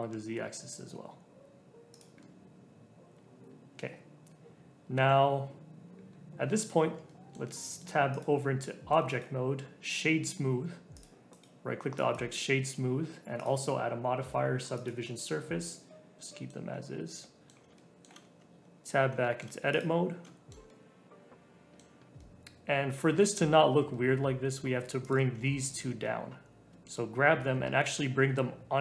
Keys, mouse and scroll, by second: 2.2-5.2 middle drag, 6.0 scroll down 3, 6.8 Tab, 7.0-8.1 middle drag, 8.1 click, 8.7 shift+middle click, 9.0 right click, 10.8 right click, 10.9 click, 12.1 right click, 12.7-13.3 scroll up 1, 13.3-16.2 drag, 16.2 middle click, 16.6-16.9 scroll down 3, 16.9 scroll up 1, 17.2-18.3 middle drag, 18.3 Tab, 18.6-19.2 scroll up 2, 19.2 shift+middle click, 19.7 click, 19.9 scroll up 2, 20.2-25.0 middle drag, 25.0 click, 25.7 shift+click, 26.0-27.4 middle drag, 27.4 g.